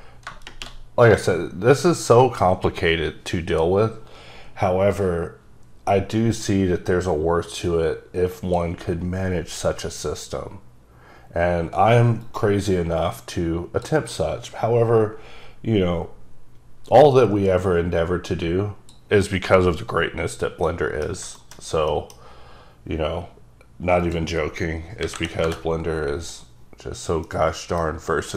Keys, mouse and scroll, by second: 0.3 scroll up 2, 6.2 click, 12.5-13.9 typing, 12.5 click, 14.4 click, 17.1 click, 20.7 middle click, 21.1 scroll down 3, 21.5 middle click, 22.0 middle click, 22.4 scroll up 1, 24.1 click, 25.1 KP_6, 25.2 KP_0, 25.6 KP_Enter, 27.4 middle click.